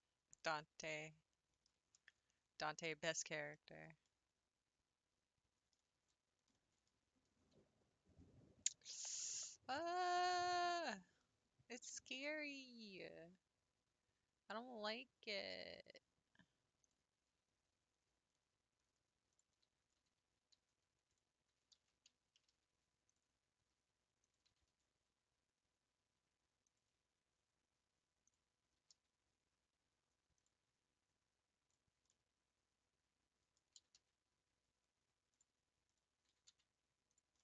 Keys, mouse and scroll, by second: 0.9 middle click, 1.8-2.1 scroll down 3, 2.1 Tab, 2.5 scroll down 3, 2.9-5.7 middle drag, 5.7 Tab, 6.1-6.5 scroll up 2, 6.5-10.7 middle drag, 10.7 click, 12.2 click, 12.8-13.2 scroll up 1, 16.8 click, 17.4 r, 21.7 ctrl+z, 22.5 g, 23.6 r, 24.5 g, 28.2 click, 28.7 g, 28.8 g, 31.7 click, 32.1-33.7 middle drag, 33.7 s, 35.9 click, 36.4 s.